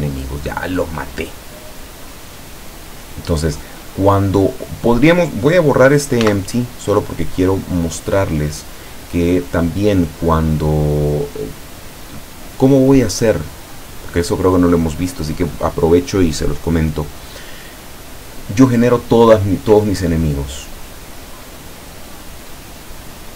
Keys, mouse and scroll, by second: 6.3 x, 6.6 click, 7.7 right click, 10.8-12.3 middle drag, 13.1 click, 14.0 click, 21.1 middle click, 22.4 click, 23.2 click.